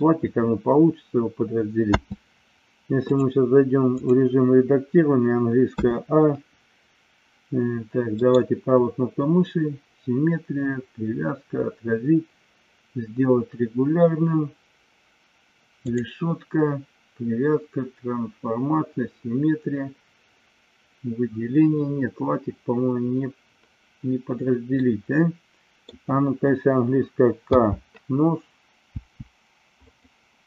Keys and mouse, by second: 2.0 space, 3.2-4.1 drag, 5.7 a, 8.2-14.1 right drag, 16.0-24.1 drag, 24.8-25.8 middle drag, 27.3 k, 29.7 click.